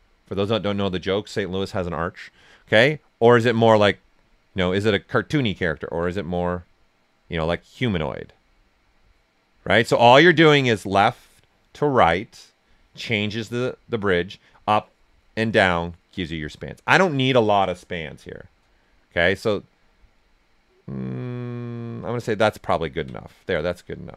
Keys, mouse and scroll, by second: 22.7 ctrl+right click, 23.8 right click.